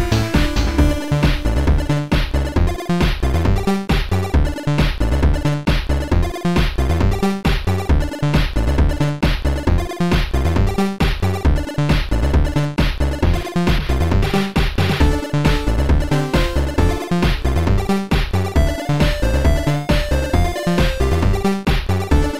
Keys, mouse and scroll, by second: 0.7 click, 0.9 click, 2.6 click, 2.9 click, 6.7 click, 7.7 click, 9.7 click, 12.4 click, 13.4 click, 14.4 click, 15.4 click, 17.6 click, 18.7 click, 20.9 click, 22.2 click.